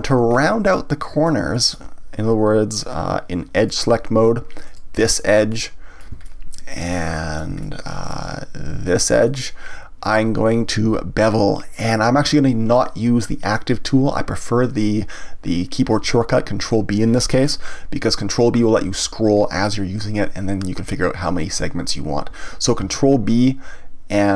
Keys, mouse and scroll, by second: 0.3 scroll up 1, 0.7-3.6 middle drag, 3.6 click, 4.6 click, 5.5-9.2 middle drag, 9.2 shift+click, 22.8 ctrl+b.